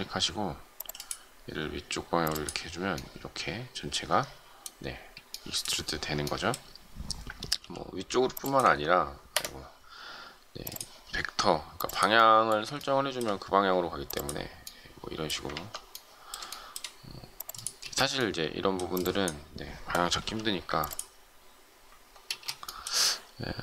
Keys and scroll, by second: 4.9 space, 7.5 m, 9.1 ctrl+Escape, 15.4 ctrl+z, 19.0 space, 20.2 m, 22.3 ctrl+space.